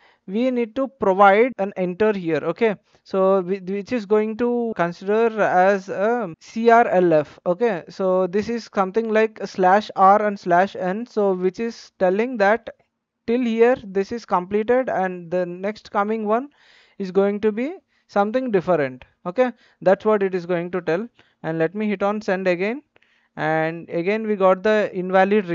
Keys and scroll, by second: 3.4 Return.